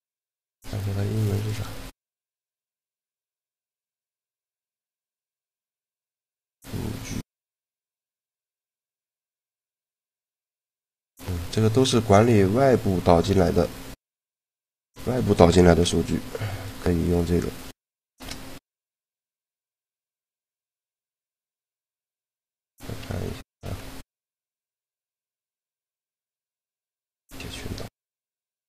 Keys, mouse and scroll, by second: 1.8-4.5 middle drag, 3.7 shift+e, 12.7 middle click, 13.6 click, 14.5-15.6 right drag, 16.7 shift+l, 17.6 shift+l, 19.6-21.1 drag, 22.8 a, 24.2 right click, 27.7 click, 27.7 b.